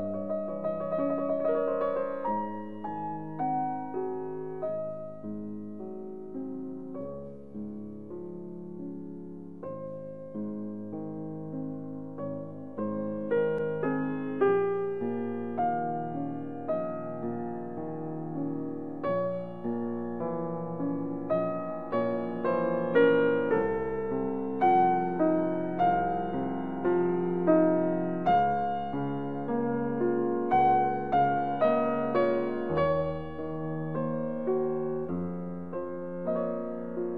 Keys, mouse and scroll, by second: 6.0 click, 7.2-13.9 middle drag, 13.9 click, 16.7 middle click, 17.4 ctrl+r, 20.9 click, 27.3 click, 29.4 click, 30.7 ctrl+r, 33.0 click.